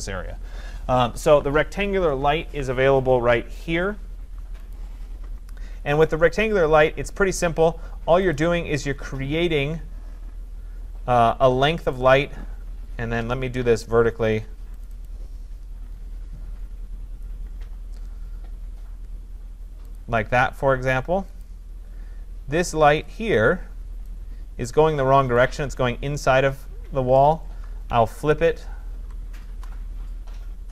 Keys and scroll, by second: 29.5 Return.